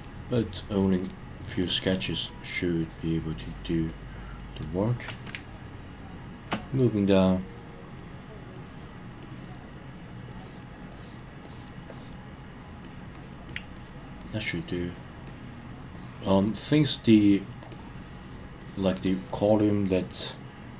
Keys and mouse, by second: 0.4 click, 0.7 click, 1.0 click, 1.6 click, 1.9 click, 2.8 click, 3.4 click, 3.9 middle click, 5.3-6.5 shift+middle drag, 8.0 click, 8.5 click, 9.2 click, 10.3 click, 10.9 click, 11.4 click, 11.9 click, 12.8 click, 13.1 click, 13.5 click, 13.7 click, 14.2 click, 14.6 click, 15.2 click, 15.9 click, 16.5 click, 17.2 click, 17.7 click, 18.6 click, 19.0 click, 19.6-20.7 middle drag.